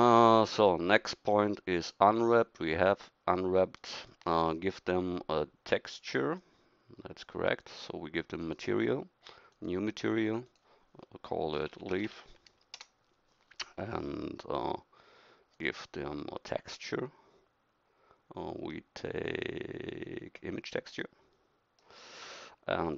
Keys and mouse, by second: 6.8 middle click.